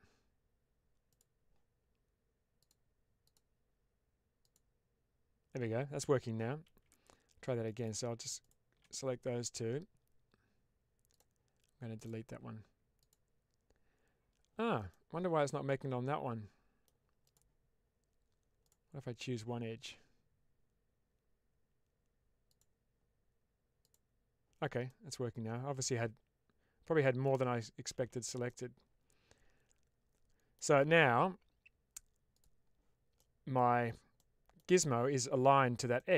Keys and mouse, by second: 1.0 click, 3.1-5.5 drag, 6.6 ctrl+z, 7.6 click, 8.3 shift+click, 14.9-16.7 middle drag, 17.1 click, 18.5 click, 24.8-27.1 middle drag, 27.8 ctrl+z, 28.3-30.4 middle drag, 32.2 click, 33.2 middle click, 34.2 middle click, 35.9 middle click.